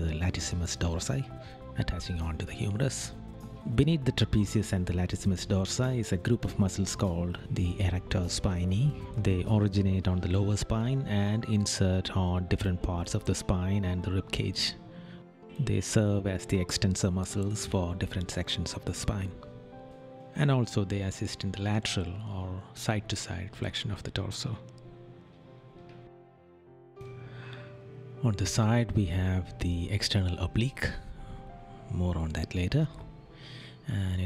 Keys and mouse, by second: 1.2 right click, 3.7 right click, 10.7 right click, 16.9 right click, 20.0 right click, 21.9 right click, 25.5 right click, 27.2 right click, 30.1 right click.